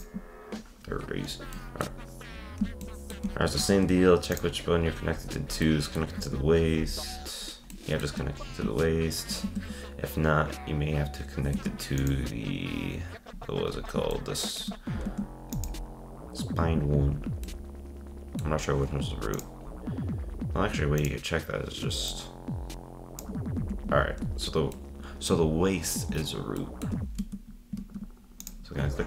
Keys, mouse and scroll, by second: 1.5-3.7 middle drag, 3.7 ctrl+Tab, 4.3-4.7 drag, 4.8-5.6 scroll up 8, 5.6-6.2 middle drag, 6.2 ctrl+Tab, 6.5-6.9 scroll down 11, 7.6 scroll up 1, 7.7-9.5 shift+middle drag, 9.5 ctrl+Tab, 11.5 ctrl+Tab, 12.0 click, 13.3-14.1 scroll up 4, 14.1 shift+middle click, 15.1 ctrl+Tab, 15.5 click, 17.4-19.3 middle drag, 19.3 click, 19.6-21.0 scroll down 3, 21.0-22.1 drag, 23.6 z, 24.7-27.2 middle drag, 27.2 ctrl+Tab, 27.8 ctrl+Tab, 28.4 click.